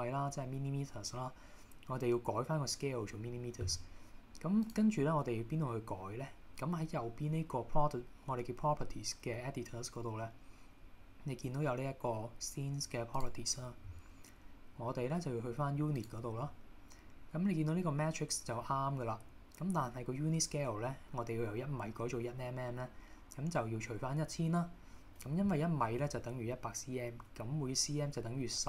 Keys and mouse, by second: 4.7 click, 13.3 click, 16.1 drag.